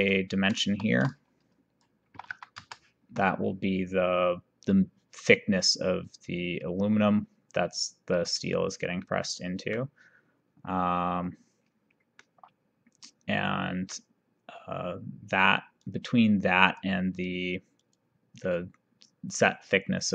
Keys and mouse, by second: 0.9 shift+d, 2.1 KP_1, 2.2 KP_Decimal, 2.4 KP_2, 9.1 middle click, 12.2 middle click, 15.9 click, 18.0 click.